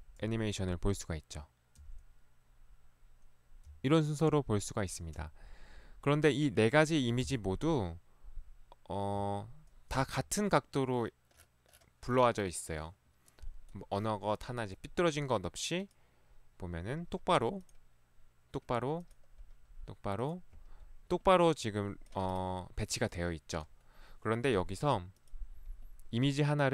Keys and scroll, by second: 0.2 Right, 1.8 Right, 3.8 Left, 5.3 Left, 7.3 Left, 9.1 Left, 10.0 Escape.